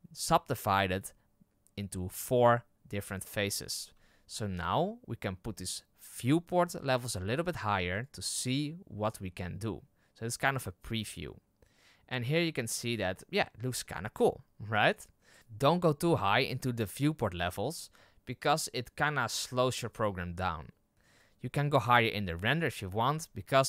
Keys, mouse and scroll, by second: 3.9 z, 7.4-12.6 drag, 12.6 scroll up 1, 13.0-15.2 middle drag, 15.2-18.8 drag, 18.8-23.6 middle drag.